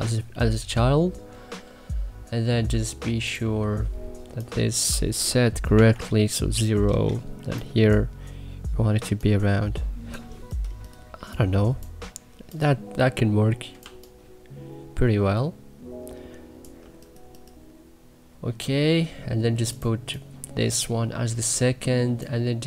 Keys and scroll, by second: 5.7 0, 6.8 Return, 11.1 3, 13.8 3.